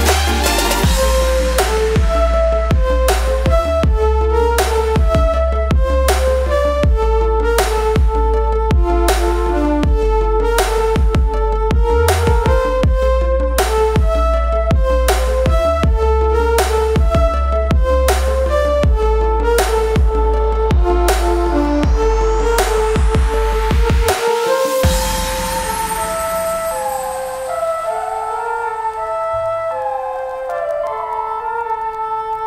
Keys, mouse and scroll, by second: 0.8 right click, 1.6 click, 4.8 typing, 7.1 click, 7.8 typing, 10.5-12.7 typing, 11.9 click, 14.7 click, 18.7-21.9 drag, 21.9 shift+click, 24.2 ctrl+r, 25.1-32.4 drag.